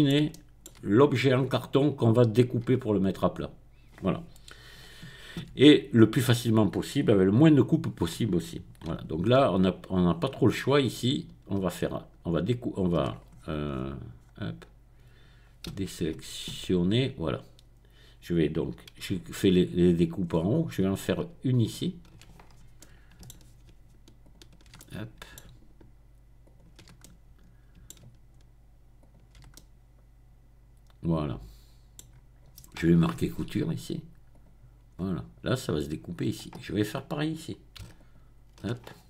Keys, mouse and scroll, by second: 1.4-2.1 scroll up 2, 2.1 middle click, 5.2 Tab, 5.5 Tab, 10.1-10.6 scroll down 2, 10.6-11.2 scroll up 2, 11.2 scroll up 1, 13.3-14.0 scroll down 2, 14.0-14.8 scroll up 2, 15.8 a, 16.2 a, 16.5 a, 16.9-17.9 scroll up 1, 19.5-20.3 scroll down 1, 20.3-21.1 scroll up 1, 21.7 alt+click, 24.2 alt+shift+click, 25.4-26.4 alt+shift+middle drag, 26.4 alt+shift+click, 26.7-28.1 alt+shift+middle drag, 29.0 alt+shift+middle click, 32.1-32.7 scroll down 1, 32.7 click, 32.9 right click, 33.1 middle click, 34.3 click, 34.9 scroll down 1, 34.9-36.2 scroll up 1, 37.9 alt+click.